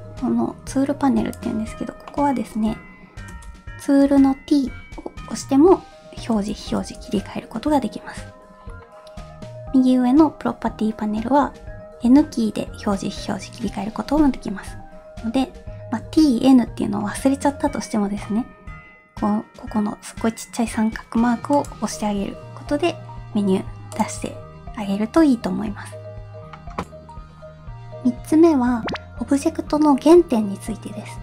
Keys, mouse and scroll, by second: 2.1 middle click, 3.3 t, 4.1 t, 6.4 t, 6.8 t, 11.4 n, 12.1 n, 15.4 n, 16.0 t, 21.7 click, 24.0 click.